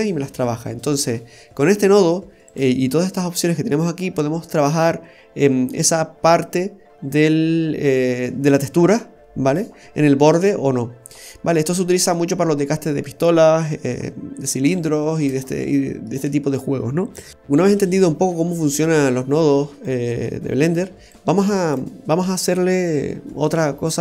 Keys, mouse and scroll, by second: 0.4 scroll down 2, 2.5 click, 9.7-10.8 scroll down 1, 12.1 middle click, 13.5 scroll up 1, 14.0 middle click, 14.7 shift+middle click, 15.6 middle click, 17.3 Delete, 17.3 click, 17.6 click, 17.9 Delete, 18.8 click, 21.1 click, 21.7 Delete, 22.4-23.0 scroll up 5, 22.9 typing, 23.5 middle click.